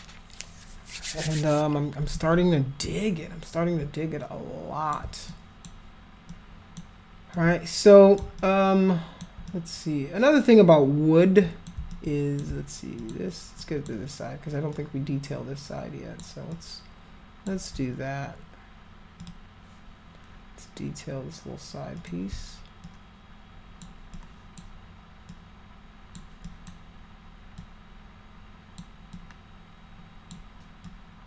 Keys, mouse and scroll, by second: 3.5-4.9 alt+drag, 5.3 alt+click, 6.2 alt+click, 7.3 alt+click, 8.4 alt+click, 9.5-11.6 drag, 11.9 alt+click, 13.0 alt+click, 13.6 alt+click, 14.7-16.2 alt+drag, 16.5 alt+click, 19.2 click, 22.0 click, 22.8 alt+click, 24.1 alt+click, 25.3 alt+click, 26.4 alt+click, 27.6-28.7 alt+drag, 29.1-30.3 alt+drag, 30.8 alt+click.